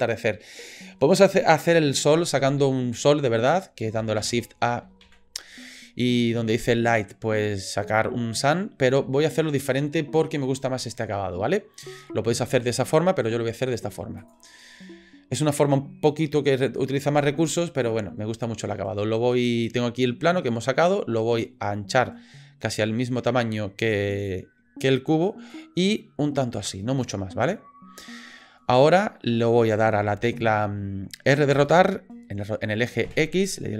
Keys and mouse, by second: 4.2 shift+a, 21.5-24.3 drag, 25.6-27.0 drag, 27.5 middle click, 31.5 r.